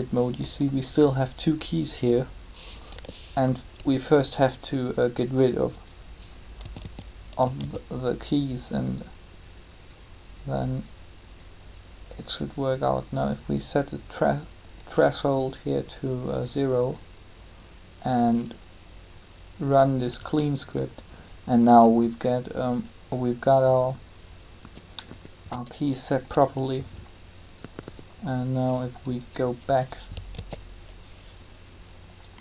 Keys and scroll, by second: 2.9 g, 3.7 Tab, 6.6-7.5 typing, 20.0 Tab, 25.4 Tab, 30.3 alt+a.